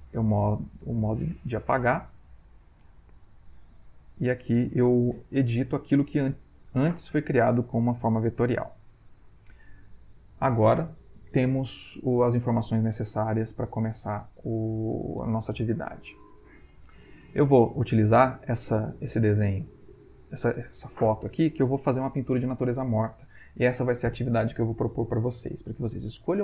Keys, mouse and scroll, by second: 1.4 e, 9.2 click, 17.8 click.